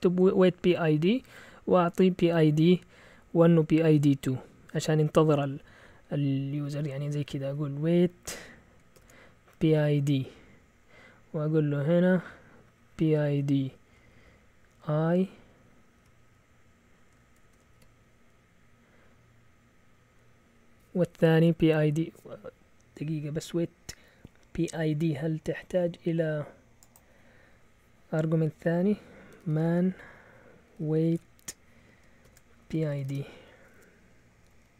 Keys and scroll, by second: 6.7 Left, 6.8 Left, 6.9 Left, 7.1 Left, 7.2 Left, 7.4 Left, 8.9-10.3 typing, 10.6 Right, 12.6-14.1 typing, 16.0 typing, 17.2-18.2 typing, 29.0-33.4 typing, 34.4 Up, 34.6 Left.